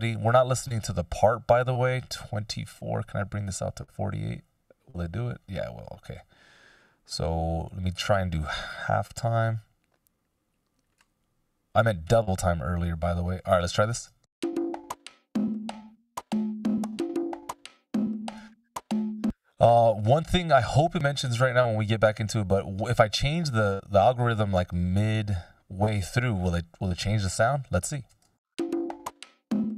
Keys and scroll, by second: 14.1 shift+space, 18.4 space, 28.3 shift+space.